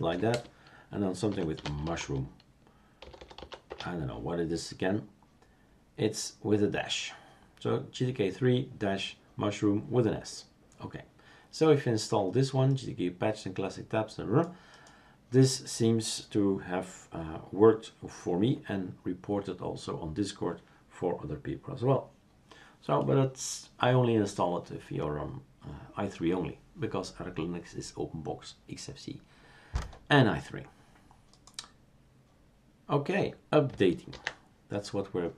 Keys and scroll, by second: 0.0-0.1 typing, 1.6-5.2 typing, 34.1 ctrl+c, 35.1 ctrl+c.